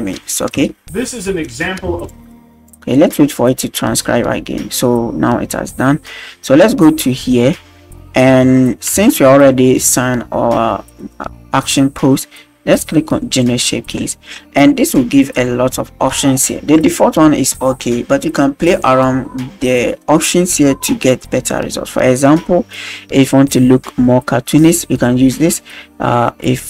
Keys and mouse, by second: 0.5 space, 1.9 space, 2.1 click, 9.0 shift+middle drag, 9.5 middle drag, 13.3-26.6 drag.